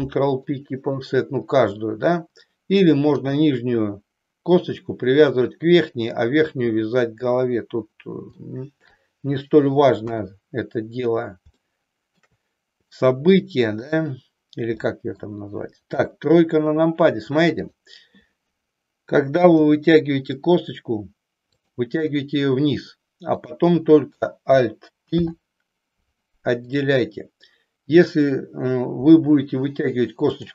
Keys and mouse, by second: 3.1 click, 8.4 shift+middle click, 10.0 KP_1, 11.6 shift+middle click, 13.1 middle click, 14.9 middle click, 16.0 KP_3, 19.5 e, 21.6 click, 25.1 alt+p.